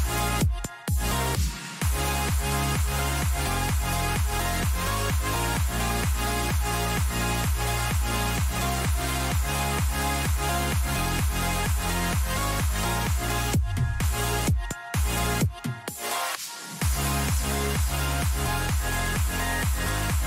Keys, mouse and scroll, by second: 1.1-3.6 drag, 4.1 a, 4.4-6.4 right drag, 5.2-9.1 drag, 6.6 a, 9.1-13.1 middle drag, 16.0-20.2 middle drag.